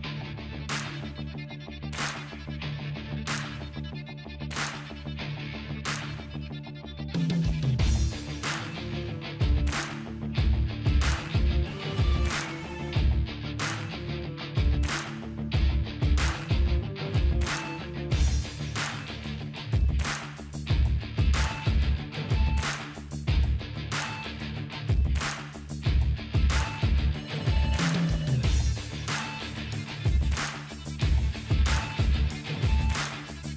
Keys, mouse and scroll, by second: 6.7-9.0 drag, 9.4 Right, 10.7 Left, 16.2 Left, 16.5-18.8 drag, 28.2-30.9 drag.